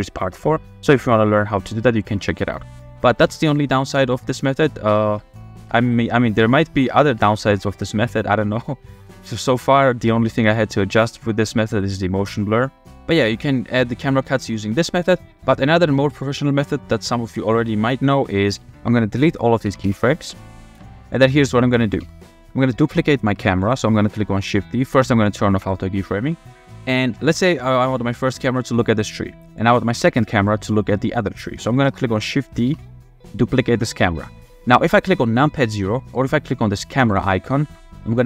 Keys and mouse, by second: 3.1-3.6 drag, 4.1 click, 4.7 space, 5.5 space, 7.0 space, 8.8 space, 9.5-12.9 drag, 13.1 space, 15.3 space, 15.9 click, 19.7 a, 19.8 x, 21.3-21.6 drag, 22.0 f, 23.0 shift+middle drag, 26.5 shift+middle click, 28.2 g, 31.7 shift+click, 32.7 shift+d, 33.8-35.7 drag, 37.0-38.1 drag.